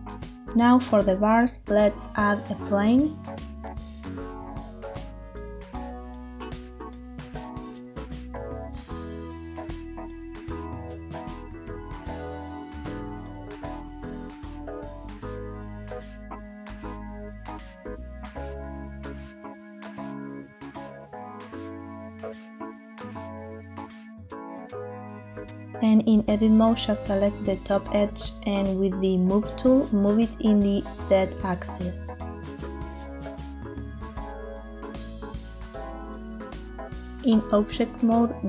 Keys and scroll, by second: 2.1 shift+a, 7.4 0, 7.9 Return, 9.5 s, 17.8 s, 24.2 Tab, 26.4 2, 36.6 Tab, 38.0 shift+d.